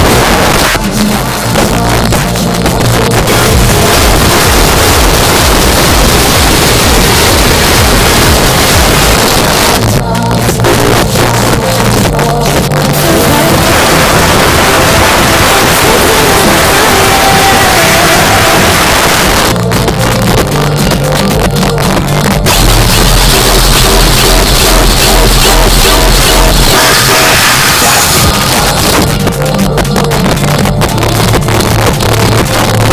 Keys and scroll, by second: 0.2 Page_Down, 9.1 Page_Down, 18.8 Page_Down, 28.3 Page_Down.